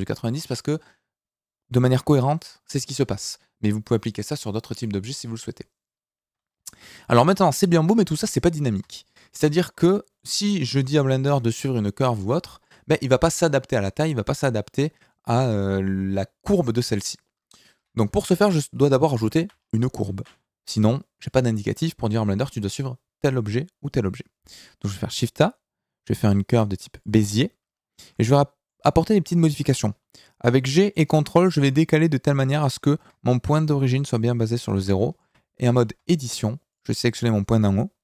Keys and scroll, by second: 17.7 KP_7, 20.0 shift+a, 30.6 g, 35.9 Tab.